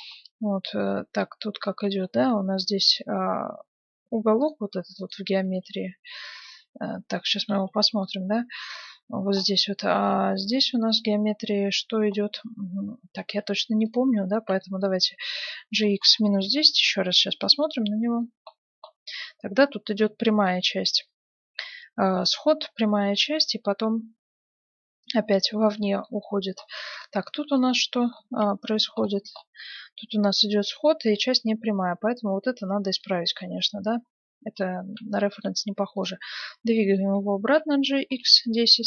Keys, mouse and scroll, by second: 1.8 Tab, 3.7 Tab, 4.4-6.7 right drag, 5.4 Tab, 7.4 Tab, 8.0-9.6 right drag, 8.6 Tab, 10.3-12.1 scroll down 1, 13.3 Tab, 13.8-15.5 right drag, 14.6-16.6 middle drag, 15.5 g, 18.5-20.8 middle drag, 25.2 middle click, 26.2 middle click, 26.7-27.8 middle drag, 26.9-29.2 right drag, 28.4 z, 28.6 middle click, 29.3 right click, 31.1 Tab, 32.4-32.9 scroll down 1, 32.9-34.5 middle drag, 33.8 Tab, 36.6 g, 37.5 click, 38.7 middle click.